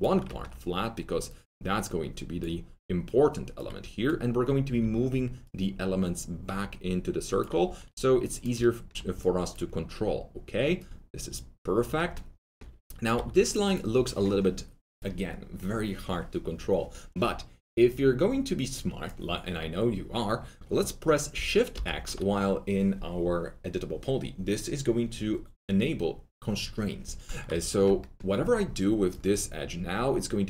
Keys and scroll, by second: 4.6 w, 7.6 1, 13.1 alt+2, 21.7 shift+x, 27.4 shift+x.